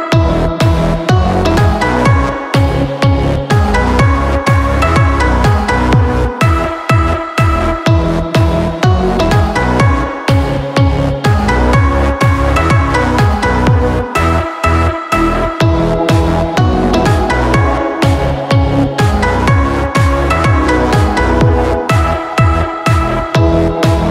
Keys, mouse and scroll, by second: 0.3-1.7 middle drag, 1.7 drag, 2.8 middle click, 3.5 Tab, 4.1-4.9 middle drag, 4.9 r, 7.8-9.8 middle drag, 10.6-11.8 middle drag, 11.8-15.1 scroll down 1, 15.1-16.7 scroll down 1, 16.7 scroll down 1, 16.7 click, 17.5-20.8 drag, 22.0-23.8 drag, 24.0 middle click.